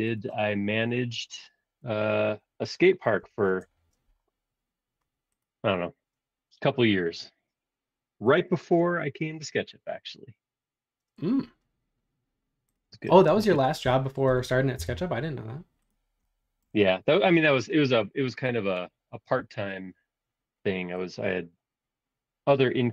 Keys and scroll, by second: 1.8-3.7 typing, 13.3 space, 14.7 l, 19.3 a.